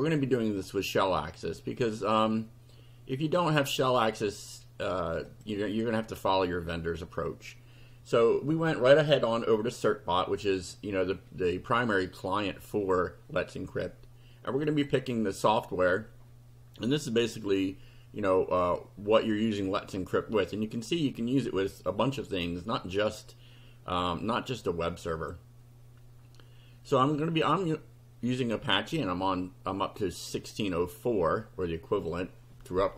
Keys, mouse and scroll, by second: 5.3 click, 14.6 click, 25.2 click, 28.4 click, 30.5 click, 32.1 click.